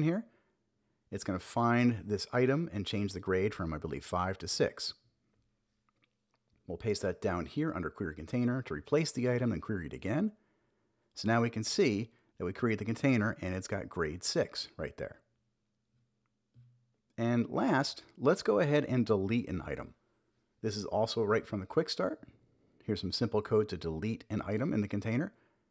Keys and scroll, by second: 1.6 super+s, 5.6 super+v, 6.2 super+s, 9.0 super+j, 9.6 Up, 10.1 Return, 14.5 Return, 15.3 super+j, 21.8 Return, 22.1 super+v, 22.6 super+s.